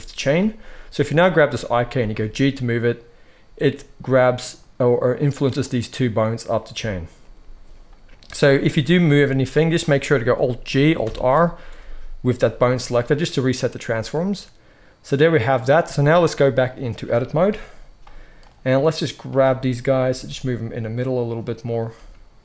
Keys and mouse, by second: 1.1-1.9 drag, 1.9 g, 9.0 g, 10.6 g, 11.0 alt+r, 12.0-16.2 middle drag, 16.2-21.2 drag, 17.4 KP_1, 20.0 g, 21.2-22.4 middle drag, 21.9 g.